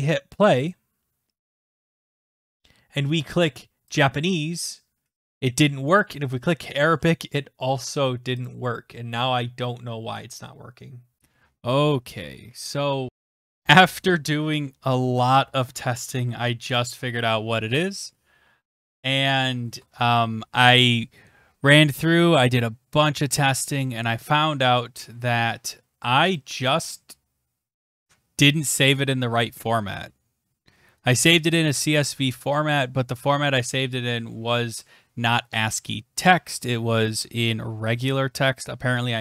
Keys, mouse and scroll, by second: 0.7 click, 2.5 click, 4.0 click, 6.0 click, 8.5 click, 11.2 click.